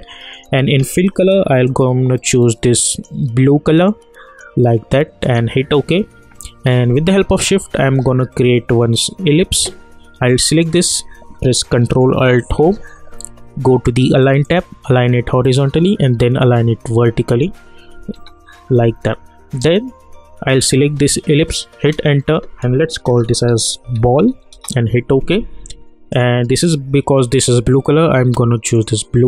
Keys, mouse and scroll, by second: 12.5 ctrl+alt+Home, 14.4 click, 18.1 u, 20.5 click, 21.9 Return, 23.1-24.5 typing, 24.5 Return, 26.1 click, 28.7 click.